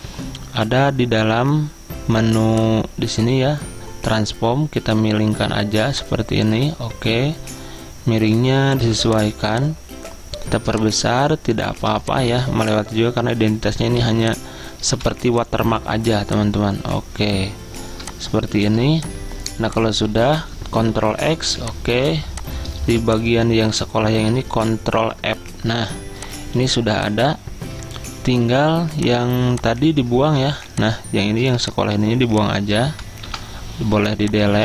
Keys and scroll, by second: 21.0 ctrl+x, 21.0-21.5 typing, 24.3-25.0 typing, 30.5 ctrl+2, 31.5 z, 33.3 Delete.